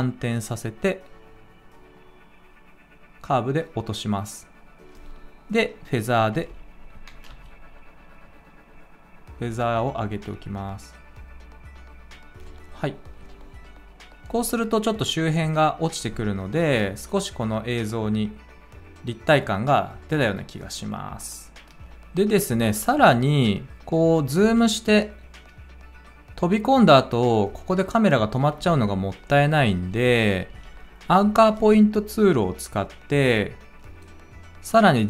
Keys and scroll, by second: 6.3 f, 7.2 f, 24.3 space, 28.5 space, 30.4 a.